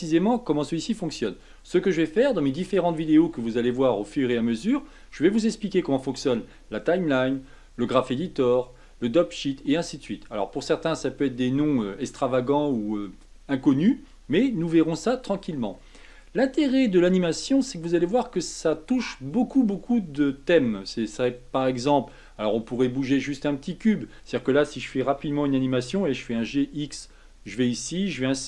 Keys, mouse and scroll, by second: 25.2 g.